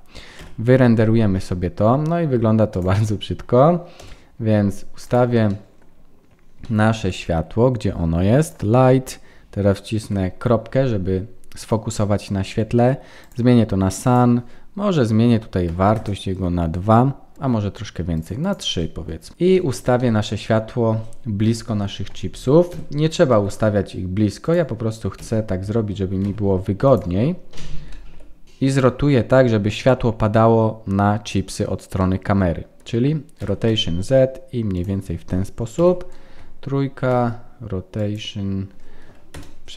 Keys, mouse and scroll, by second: 4.0 KP_0, 4.4-5.0 scroll down 3, 5.0 click, 5.0 scroll down 2, 5.5 middle click, 6.0-6.6 scroll down 2, 6.6 shift+middle click, 7.0 scroll down 2, 7.4-8.1 scroll up 3, 8.4 click, 10.0 KP_Decimal, 10.6-11.5 scroll down 2, 11.5-12.2 scroll down 3, 13.2 click, 14.0 click, 18.1 click, 19.3 scroll down 5, 19.5 shift+middle click, 20.0 middle click, 21.5 KP_1, 22.7 g, 27.2-28.4 scroll up 11, 27.9 shift+middle click, 28.4-29.5 scroll down 3, 32.0 middle click, 33.4 r, 35.8 KP_3, 37.1 r, 39.3 KP_0.